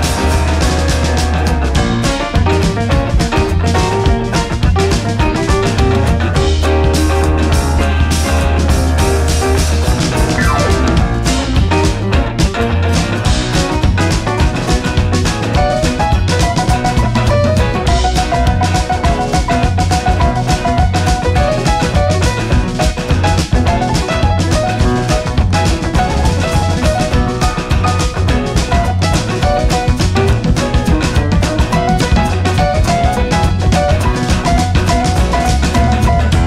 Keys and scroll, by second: 3.1 ctrl+c, 13.7 ctrl+v.